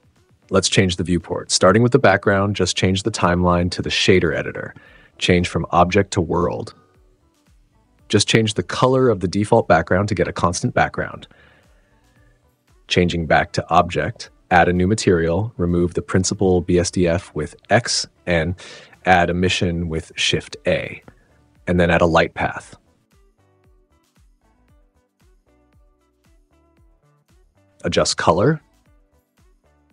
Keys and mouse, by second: 0.0 n, 0.7 click, 3.0 click, 3.9 click, 5.2-6.0 drag, 9.0 click, 13.4-14.0 drag, 14.6 click, 15.8 click, 16.1 x, 16.6 shift+a, 21.1 click, 22.0 shift+a, 26.2-27.4 drag, 27.7 click.